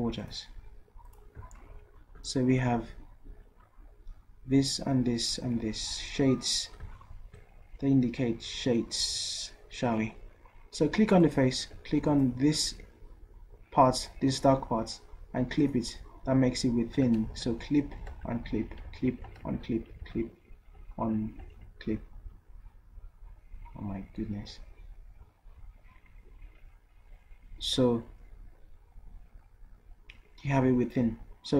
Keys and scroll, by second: 17.3 ctrl+z, 18.1 ctrl+shift+z, 18.9 ctrl+z, 19.4 ctrl+shift+z, 20.0 ctrl+z, 21.6 ctrl+shift+z.